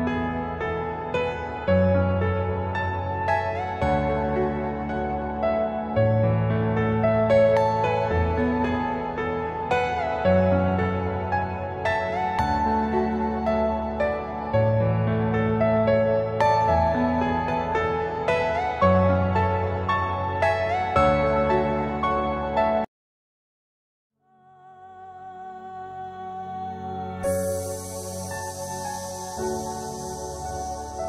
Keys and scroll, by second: 0.4-2.1 typing, 6.5 space, 7.5 F2, 13.0 5, 15.3 F3, 16.6 F4, 18.2 Escape, 19.2 shift+F2, 20.7 F3, 24.7 0, 24.9 Return, 27.2 5, 27.4 Return, 29.6 space, 30.0 Escape, 30.7 Delete.